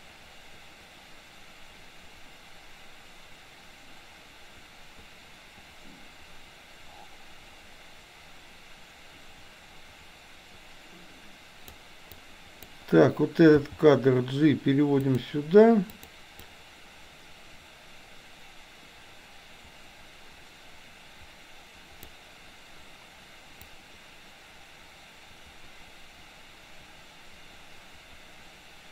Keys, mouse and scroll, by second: 12.1-12.8 drag, 13.6 g, 15.9 click, 16.4-22.1 drag, 23.6-28.9 drag.